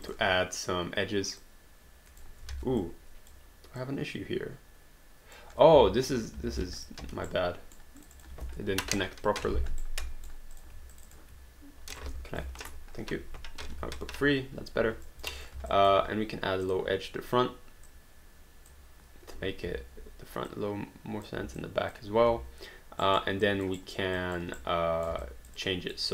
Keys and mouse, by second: 0.1 click, 1.4 click, 2.5 ctrl+z, 2.8 alt+click, 5.6 q, 6.5 alt+d, 6.8 click, 7.0 1, 7.3 right click, 8.0 click, 9.0 ctrl+Delete, 9.8 right click, 10.6 click, 10.9 shift+click, 11.9 click, 12.6 Return, 13.8 2, 14.8 alt+d, 15.1 alt+click, 15.4 click, 15.7 alt+click, 16.7 click, 17.9 click, 20.5 click, 21.7 alt+click, 23.0 alt+right click, 23.5 alt+click, 23.8 alt+right click, 24.2 alt+click, 24.6 right click, 25.2 alt+click.